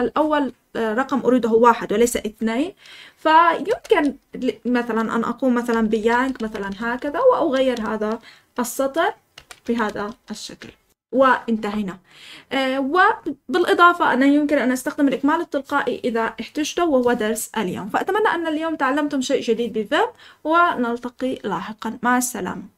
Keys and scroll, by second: 3.6-8.3 typing, 9.3 typing, 9.8 Escape.